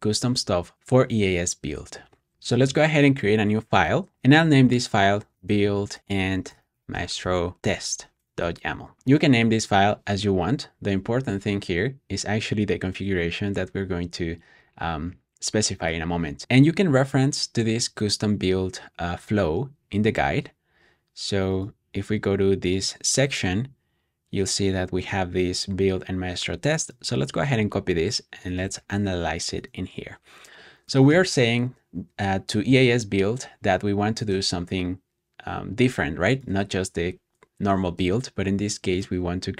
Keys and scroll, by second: 0.6-1.4 typing, 4.2-9.4 typing, 28.7 super+v.